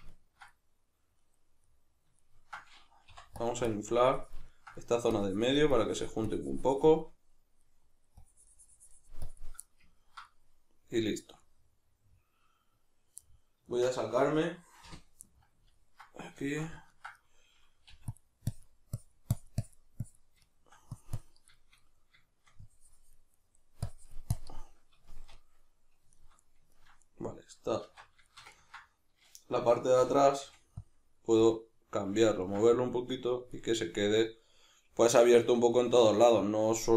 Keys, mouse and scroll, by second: 3.4-4.5 drag, 4.5 ctrl+middle click, 5.1-7.0 drag, 7.0-8.2 middle drag, 8.2-9.6 drag, 9.6-18.5 middle drag, 14.8 KP_Divide, 17.9 f, 18.5-20.5 drag, 20.5 shift+middle click, 20.9 click, 21.5-22.7 shift+middle drag, 22.7 click, 23.3 middle click, 23.9 click, 24.5-30.9 middle drag, 27.9 alt+q, 30.0 g, 30.5 f, 31.4 click, 32.3 ctrl+middle click, 32.7-35.7 drag, 35.7-36.9 middle drag.